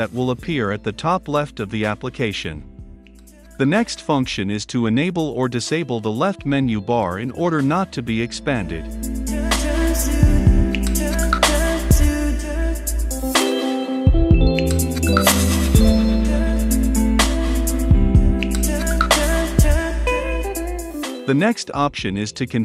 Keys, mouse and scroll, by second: 0.0 click, 0.4 ctrl+z, 1.3-2.9 middle drag, 2.9-6.2 drag, 6.2-7.5 typing, 7.7 ctrl+F5, 9.2-12.7 drag, 12.6-13.7 typing, 13.8 ctrl+e, 14.1 ctrl+F5, 15.6-18.5 drag, 18.5-20.5 middle drag, 20.5-22.6 drag.